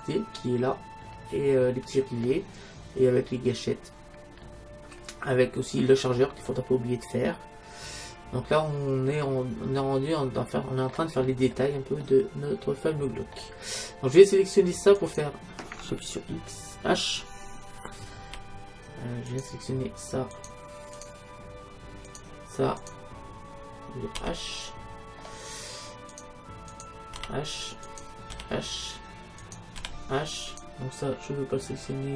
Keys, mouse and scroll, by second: 1.1 middle click, 2.4-4.5 middle drag, 4.5 scroll down 1, 4.6 middle click, 6.2-8.5 middle drag, 11.3-14.0 middle drag, 15.1-16.9 right drag, 18.3 h, 19.3-24.0 right drag, 24.2 h, 25.2 middle click, 26.2-32.1 right drag, 27.2 h, 28.4 h, 29.8 h.